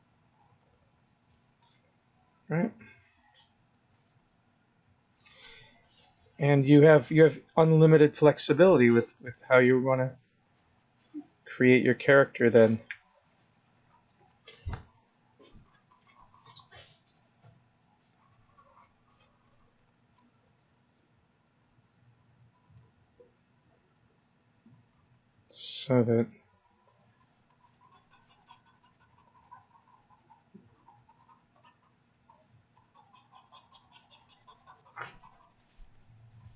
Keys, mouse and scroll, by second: 3.2 click, 4.2 click, 7.6 click, 8.5 click, 9.0 click, 9.6 click, 10.3 click, 11.8 click, 14.3 click, 17.8 click, 21.2 click, 23.8 click, 25.2 click, 26.1 click, 27.5 click, 32.7 click.